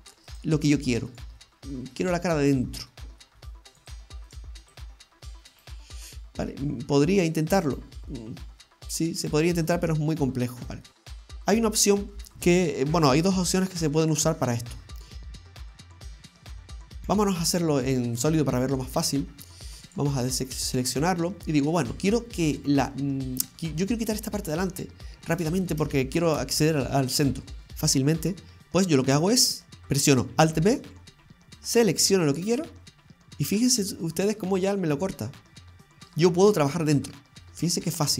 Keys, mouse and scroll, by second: 0.3 click, 4.3 right click, 4.6 click, 5.5 right click, 6.3 scroll up 2, 6.5 middle click, 7.7 right click, 8.1 middle click, 9.2 right click, 9.7 middle click, 11.0-11.6 scroll down 5, 11.6 middle click, 12.0 scroll up 1, 15.4-17.0 scroll up 1, 17.0 scroll up 1, 17.0 z, 18.8-19.3 scroll down 2, 19.3 middle click, 19.8 scroll up 1, 19.9 right click, 20.3 middle click, 25.2 scroll down 2, 26.7 shift+middle click, 30.6 alt+b, 33.8 middle click, 36.6-37.4 scroll up 4, 37.4-37.9 scroll down 4, 37.9 middle click.